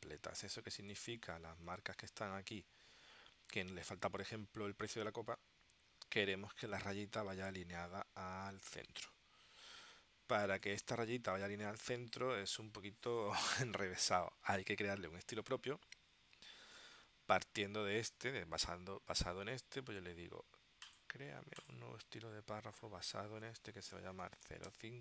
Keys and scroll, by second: 1.9 w, 9.6 w, 23.8-25.0 typing.